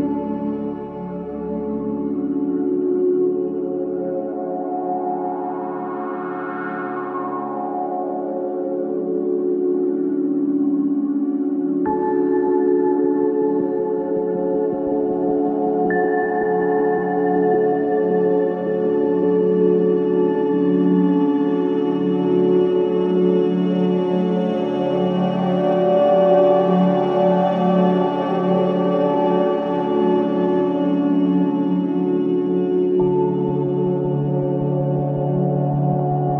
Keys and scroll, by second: 1.6 Delete, 16.2 ], 17.2 ], 17.8 ], 30.3 ], 33.0 ].